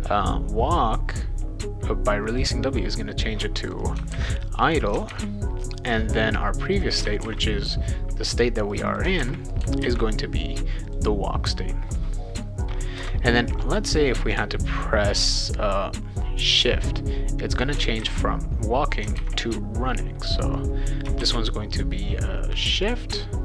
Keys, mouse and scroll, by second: 3.6 click, 3.8 click, 4.1 ctrl+c, 4.6 click, 4.8 click, 5.1 ctrl+v, 6.7 click, 6.9 click, 7.2 ctrl+c, 8.7 click, 8.9 click, 9.2 ctrl+v, 9.8 ctrl+s, 10.9 click, 13.0 Return, 16.4-17.8 drag, 18.0 ctrl+c, 18.9 click, 19.2 ctrl+v, 20.5 click, 21.2 shift+s, 22.7 click, 22.9 click.